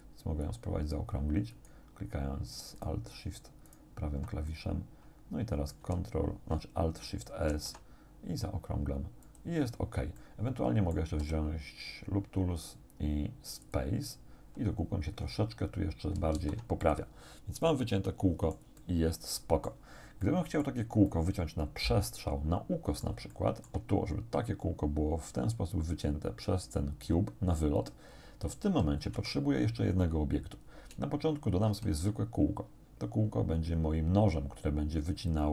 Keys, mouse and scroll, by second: 0.5 alt+shift+right click, 1.6 alt+shift+right click, 2.8 alt+shift+right click, 3.7 alt+shift+right click, 4.5-6.0 alt+shift+middle drag, 7.5 alt+shift+s, 9.3 click, 10.2 middle click, 11.2 w, 13.7 click, 16.4 alt+shift+s, 16.8 alt+shift+click, 17.3 scroll down 1, 17.7-18.8 drag, 19.0 click, 20.2 click, 21.1-23.2 drag, 23.4 shift+click, 28.7 a, 29.2 Tab, 30.4-30.7 scroll down 2, 31.7 shift+a, 35.3 click.